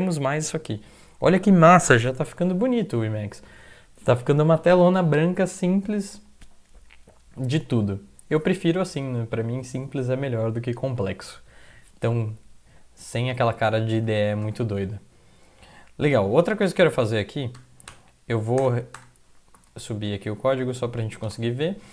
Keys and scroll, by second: 14.0 Return, 14.4 Return, 17.6-17.9 typing, 18.6 Return, 19.0 Return, 19.6 Up, 19.8 Up, 20.1 End, 21.3 space.